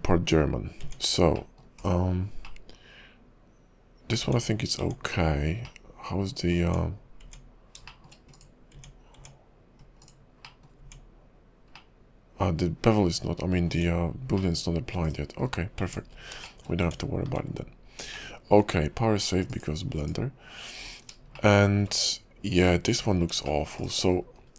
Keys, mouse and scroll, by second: 0.5 scroll down 4, 0.8 Tab, 1.5 middle click, 1.8 /, 2.6 middle click, 4.2 Tab, 4.8 Tab, 5.8 middle click, 6.6 Tab, 7.2 Tab, 8.0 shift+middle click, 8.3 click, 8.7 Tab, 9.1 Tab, 10.0 click, 10.6 middle click, 10.8 Tab, 11.9 middle click, 13.6 Tab, 14.5 middle click, 15.0 /, 15.6 scroll down 4, 15.8 Tab, 16.2-16.6 scroll down 2, 16.6 shift+middle click, 16.8 Tab, 17.2-18.0 scroll up 3, 18.0 `, 18.3 shift+middle click, 19.5 click, 21.1-21.5 scroll up 2, 21.5 shift+middle click, 22.0-22.5 scroll down 1, 22.6 click, 23.1-23.6 scroll up 3, 23.6 shift+middle click, 23.8 /, 24.3-24.5 scroll up 11.